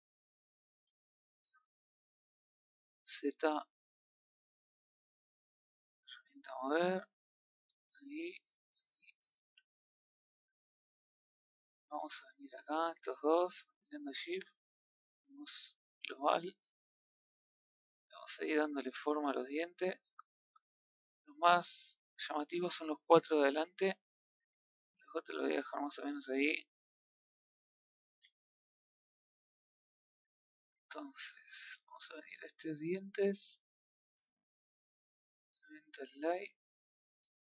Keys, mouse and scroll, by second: 0.1 middle click, 1.0 middle click, 1.5-2.1 scroll down 2, 2.1 middle click, 2.5 scroll up 1, 6.5 click, 7.5 click, 9.4 s, 10.6 middle click, 11.7 click, 12.4 shift+click, 13.6 click, 15.8 click, 16.7 z, 18.7 middle click, 19.4-19.7 scroll down 2, 19.7 middle click, 20.5 scroll down 1, 20.6 scroll up 1, 20.8-23.0 middle drag, 24.4 scroll down 1, 24.5 middle click, 25.2-25.7 scroll up 1, 25.7 middle click, 26.0-26.6 scroll up 2, 26.6-27.6 middle drag, 28.0-32.0 middle drag, 32.0 click, 33.3 shift+click, 33.4 shift+scroll up 1, 33.5-35.8 shift+middle drag, 35.8 click.